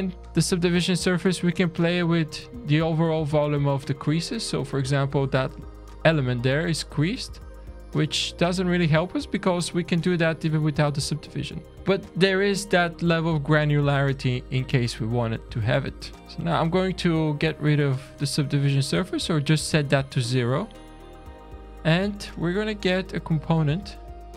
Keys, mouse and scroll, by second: 0.9 click, 4.4 scroll down 2, 4.9 shift+middle click, 7.5 click, 10.3-11.6 scroll down 1, 11.7 middle click, 11.7 click, 11.7 scroll down 1, 12.1 shift+middle click, 14.9 middle click, 16.2 click, 17.1 scroll down 1, 17.9-18.5 scroll down 1, 18.5 scroll down 1, 19.2 scroll down 2, 19.7 shift+middle click, 20.7 middle click, 21.0 Tab, 21.5-22.7 scroll up 5, 22.7 click, 23.1 `, 24.0-24.3 scroll down 3.